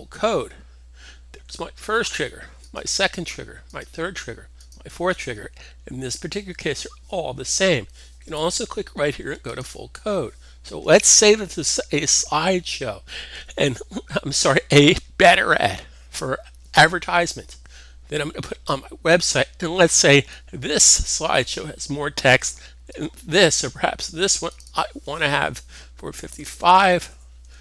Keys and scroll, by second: 26.1-27.0 typing.